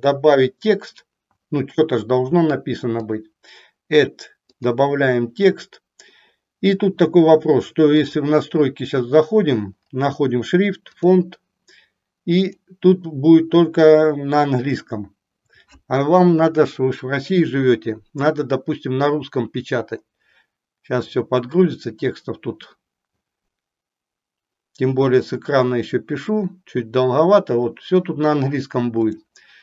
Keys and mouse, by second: 3.1-4.7 drag, 8.0 click, 10.9 click.